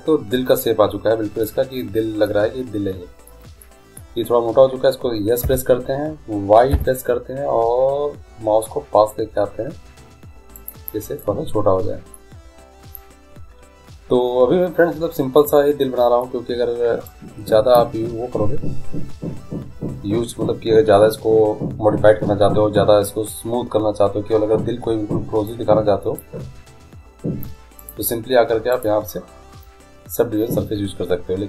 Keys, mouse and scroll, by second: 5.6 s, 11.4 middle click, 17.2-19.1 drag, 25.7-27.5 drag, 28.0-30.6 drag.